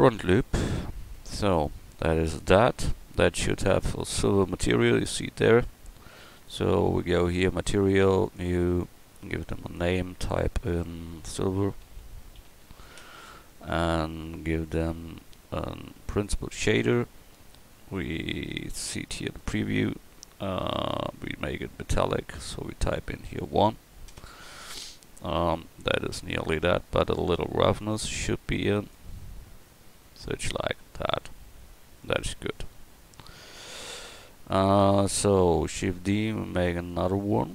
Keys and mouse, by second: 0.3 Tab, 2.5 KP_1, 6.4-12.9 drag, 12.9 /, 19.3-31.8 drag, 32.6 middle click, 33.4-36.0 middle drag, 36.0 shift+d.